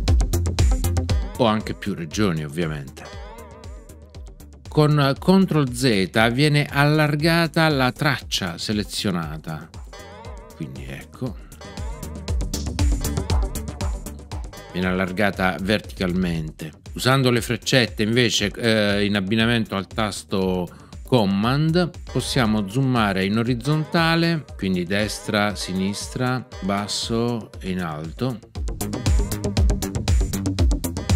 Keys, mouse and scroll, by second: 9.9 ctrl+z, 22.0 super+Right, 24.9 super+Right, 26.5 super+Down, 28.9 super+Up, 30.9 super+Right.